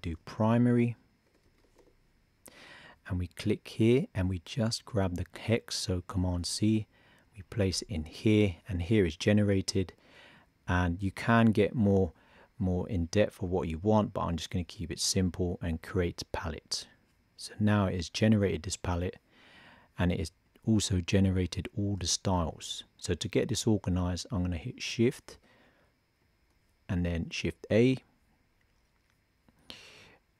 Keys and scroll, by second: 0.0 shift+p, 6.1 super+c, 8.7 super+v, 27.5 shift+a.